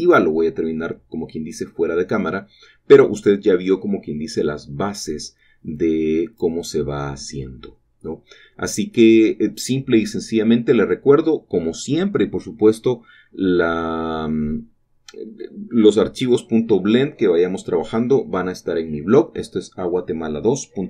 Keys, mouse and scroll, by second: 0.1 typing, 0.1 shift+click, 1.5 typing, 4.5 shift+click, 7.5 typing, 8.6 shift+click, 9.4 shift+middle click, 10.0 typing, 12.6 typing, 14.0 shift+click, 15.0 typing, 16.1 typing, 19.5 shift+click.